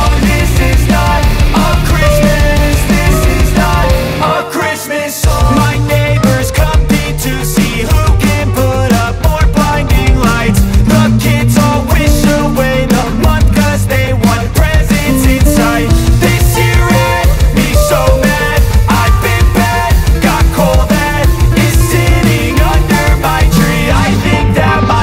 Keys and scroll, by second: 5.8 shift+F2, 6.6 Escape, 13.9 Escape.